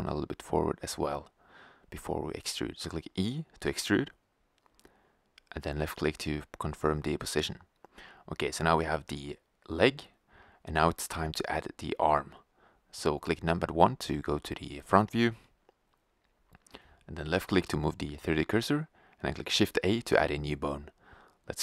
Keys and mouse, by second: 2.6 e, 6.0-8.5 drag, 9.1 middle click, 10.9-12.3 middle drag, 12.3 KP_1, 14.0 g, 17.9 click, 19.3 shift+a, 20.5 g.